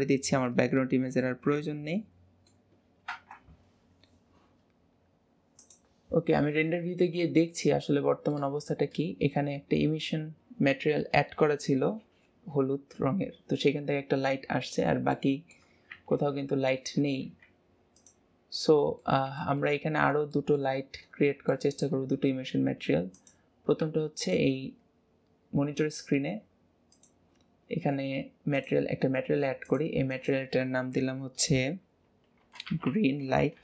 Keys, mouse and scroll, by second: 0.5-1.5 middle drag, 1.5 ctrl+s, 1.8-3.0 middle drag, 3.0 KP_0, 5.7 click, 7.6-8.9 shift+middle drag, 8.9 scroll up 1, 15.1-16.3 shift+middle drag, 16.3 ctrl+s, 17.3 z, 18.6-19.8 middle drag, 19.8-20.3 scroll up 4, 20.3-20.8 middle drag, 20.8-21.5 scroll up 4, 21.5-22.0 shift+middle drag, 22.0-22.3 scroll up 3, 22.4 Tab, 23.1 click, 23.8 Tab, 24.2 click, 26.1-26.9 scroll up 2, 26.9 click, 27.4-28.5 scroll up 4, 28.5 click, 29.0 scroll up 2, 29.6-33.0 drag, 33.0 e.